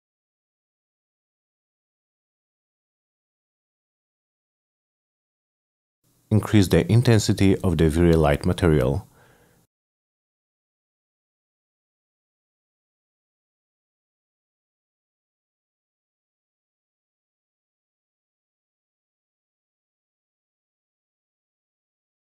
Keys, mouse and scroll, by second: 0.1 middle click, 0.5 middle click, 1.7 middle click, 4.2 click, 5.9 m, 6.9 click, 7.0 click, 7.9 click, 8.9 Return, 11.1 click, 12.0 click, 13.8-16.3 middle drag, 21.6 middle click.